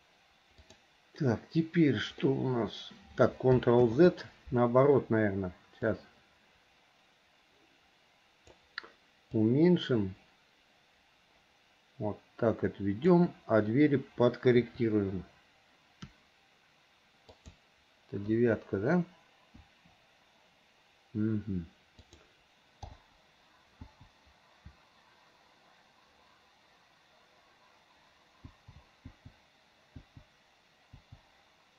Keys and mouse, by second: 0.8 click, 2.4 click, 2.4 right click, 4.0 ctrl+z, 6.0 click, 6.4-8.7 drag, 9.7-13.2 drag, 14.7 KP_1, 18.4 KP_9, 19.7 KP_9, 22.1 click, 23.0 l, 24.0 l, 28.7 l, 29.2 l, 30.2 l, 31.2 click.